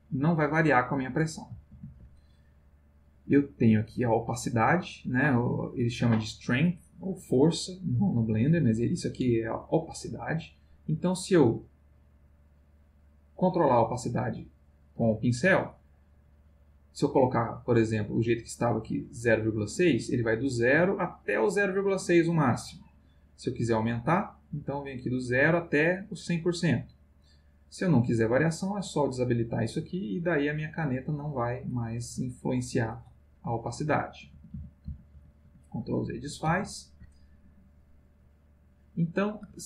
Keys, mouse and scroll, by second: 1.7 ctrl+z, 9.8-12.6 drag, 13.9 click, 15.1 click, 15.9-18.9 drag, 20.5-22.8 drag, 23.4 click, 24.8-26.4 drag, 28.4 click, 30.1-33.5 drag, 34.1 ctrl+z, 37.8 click, 38.2 click.